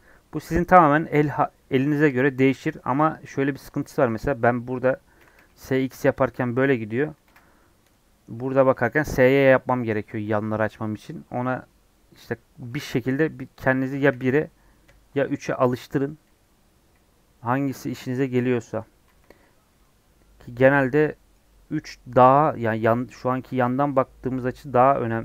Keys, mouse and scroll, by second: 3.8 shift+middle click, 4.2-5.1 scroll up 1, 5.1 s, 7.2 ctrl+z, 7.8 KP_3, 8.6 s, 10.4 scroll down 3, 10.6 middle click, 11.0 scroll up 1, 11.7 scroll up 3, 14.0 KP_1, 16.6 KP_1, 17.6 scroll down 3, 17.8-19.0 middle drag, 19.0 KP_1, 20.7 middle click, 21.4 KP_3, 24.4 scroll up 3, 24.7 scroll down 3, 24.8 middle click.